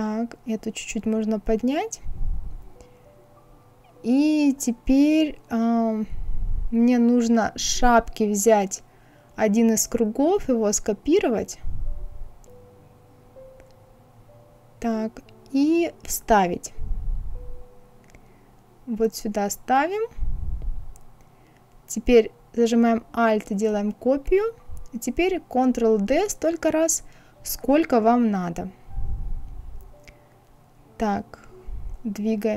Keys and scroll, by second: 11.1 ctrl+c, 15.5 ctrl+v, 25.3 ctrl+d, 26.7 ctrl+d, 30.4 Right.